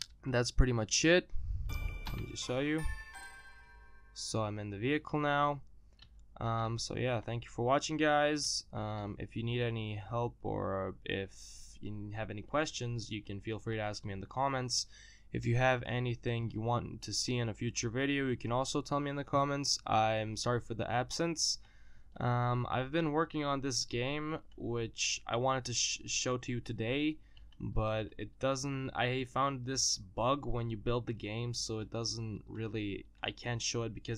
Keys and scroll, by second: 0.9 e.